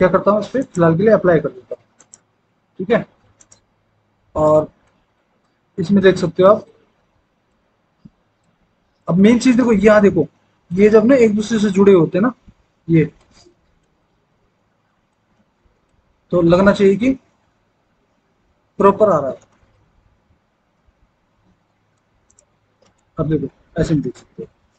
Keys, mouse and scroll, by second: 23.5 F4.